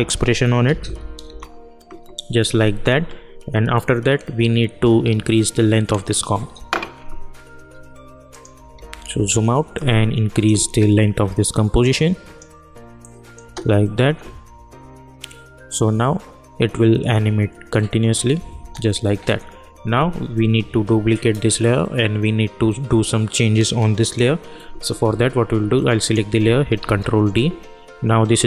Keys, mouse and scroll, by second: 0.0-0.2 typing, 0.6 Down, 1.2 Return, 8.2 click, 9.7-13.4 drag, 13.4 space, 18.5 space, 26.0 click, 26.8 ctrl+d.